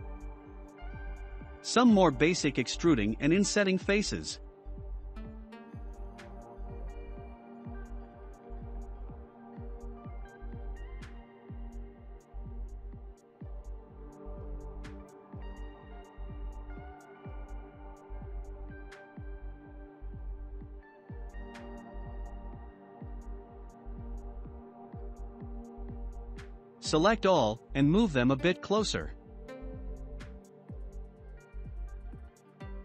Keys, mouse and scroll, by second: 1.6 i, 4.8 e, 7.9-9.3 middle drag, 11.3 e, 17.7 scroll down 2, 18.2 Tab, 18.5 click, 19.1-20.5 scroll down 12, 20.9-21.9 shift+middle drag, 21.9-22.4 scroll down 3, 22.4-25.1 middle drag, 25.1 click, 26.2 scroll down 2, 26.6-27.8 shift+middle drag, 27.8 click, 30.6-31.1 scroll up 2, 31.1-32.8 shift+middle drag.